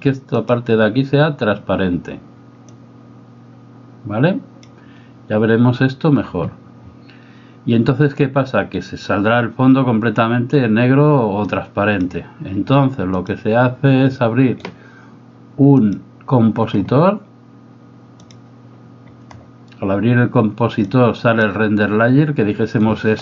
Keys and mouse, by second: 0.4 click, 2.7-4.9 drag, 11.5 click, 13.2-14.2 drag, 15.8-18.4 drag, 20.9 click.